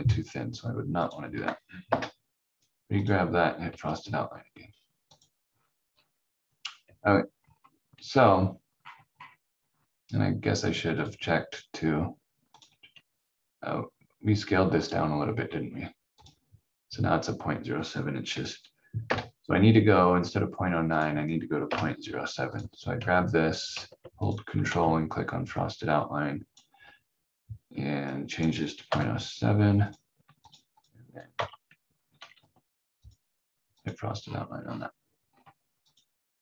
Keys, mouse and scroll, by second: 1.9 Delete, 3.0 click, 5.4 scroll down 1, 6.8 v, 7.3-8.8 scroll down 1, 8.8 scroll up 1, 10.9 click, 19.0 Delete, 20.0 scroll down 1, 20.9 click, 21.6 Delete, 22.5 click, 24.2 ctrl+click, 28.8 7, 29.9 click, 31.3 f, 32.3 ctrl+z, 33.0 click, 34.2 scroll down 1.